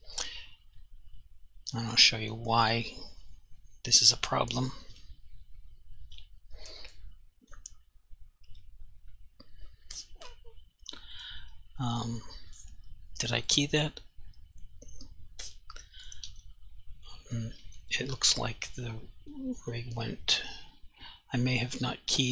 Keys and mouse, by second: 0.9 click, 4.9 click, 7.5 click, 7.6 click, 12.6 click, 21.6 click.